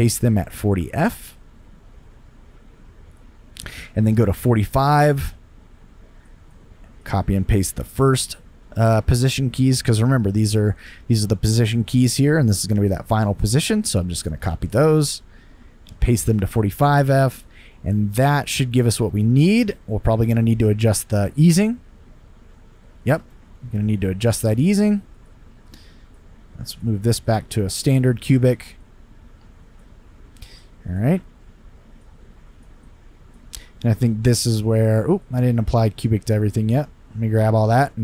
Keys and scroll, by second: 0.8 super+v, 14.7 super+c, 16.2 super+v, 21.4 space, 23.1 space.